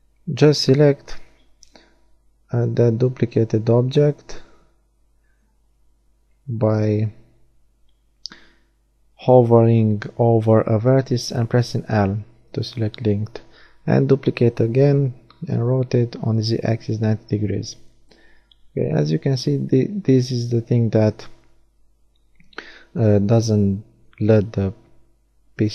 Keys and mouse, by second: 6.3 l, 8.3 l, 9.9 shift+d, 11.1 r, 14.0 click, 16.5 Tab, 18.2 shift+d, 21.7 x.